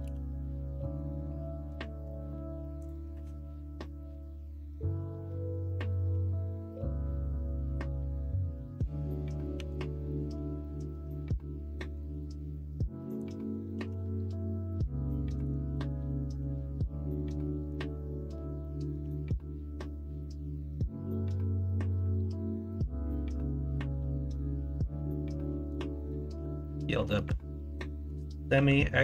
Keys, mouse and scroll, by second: 0.0 r, 9.5 g, 13.7 r, 16.3 s, 19.0 g, 28.5 s.